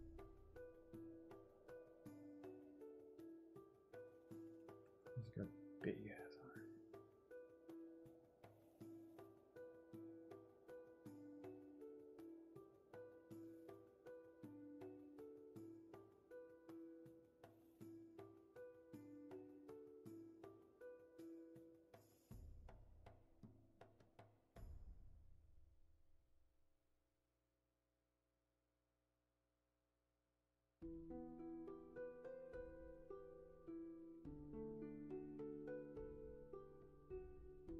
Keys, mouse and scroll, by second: 20.4 ctrl+z, 32.1 ctrl+z.